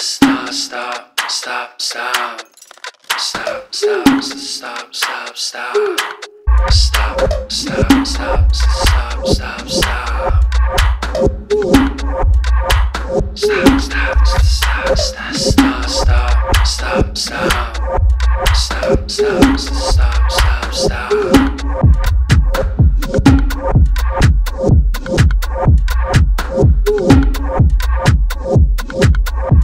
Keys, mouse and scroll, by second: 1.9 click, 1.9 typing, 3.8-5.1 typing, 7.7 click, 8.6-9.8 typing, 10.2 Return, 12.1-15.6 drag, 20.6 click, 24.1 click, 27.1 click, 28.2-29.4 typing.